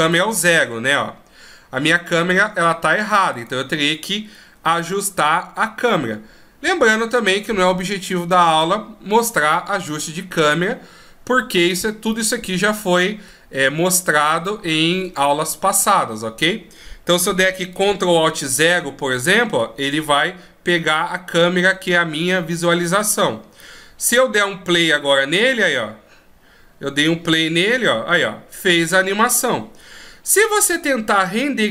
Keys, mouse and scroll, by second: 0.3 KP_0, 3.6 right click, 4.9 g, 12.4 middle click, 13.8-14.7 scroll down 1, 14.7 middle click, 14.7 scroll down 1, 18.7 ctrl+alt+KP_0, 24.4 click, 30.7 click.